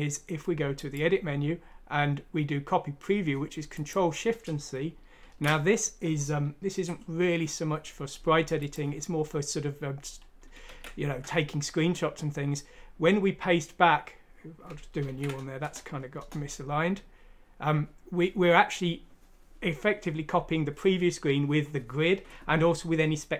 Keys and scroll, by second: 5.3 ctrl+c.